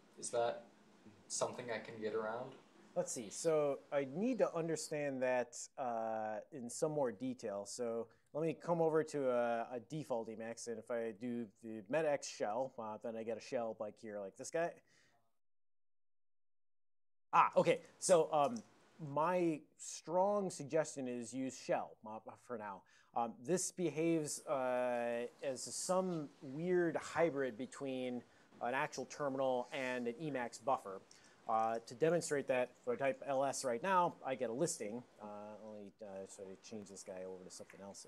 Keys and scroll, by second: 8.8 super+j, 10.2-11.8 typing, 14.2 ctrl+x, 14.7 1, 15.3 ctrl+x, 15.5 3, 33.0-33.7 typing, 33.9 Return, 35.4 alt+o, 36.3 ctrl+g, 36.5 ctrl+g, 36.6 ctrl+x, 36.9 o, 37.2 ctrl+x, 37.4 b.